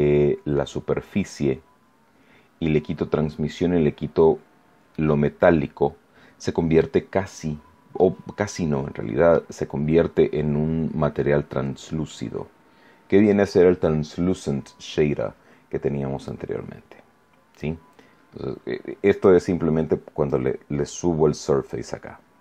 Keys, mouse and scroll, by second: 0.9-1.3 scroll up 1, 1.5 scroll down 1, 4.4 scroll down 1, 4.9-6.9 middle drag, 7.1 scroll up 1, 7.9-9.5 middle drag, 10.5 scroll down 1, 11.1-12.2 middle drag, 16.2-17.7 drag, 20.2-21.8 drag.